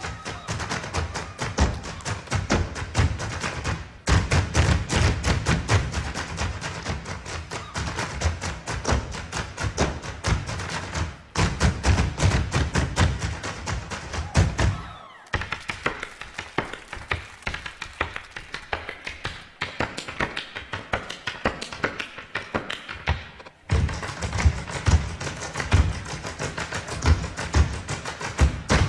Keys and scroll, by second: 8.2 super+j, 16.9 super+j, 27.3 super+z.